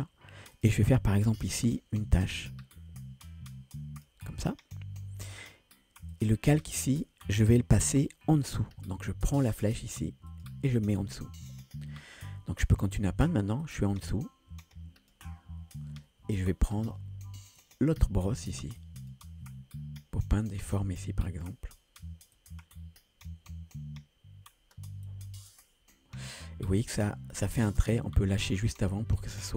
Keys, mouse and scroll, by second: 1.7-4.1 drag, 6.1-12.1 drag, 13.6-15.2 drag, 17.6-19.5 drag, 17.6 typing, 20.5-21.5 drag, 22.4 click, 25.1-28.0 drag.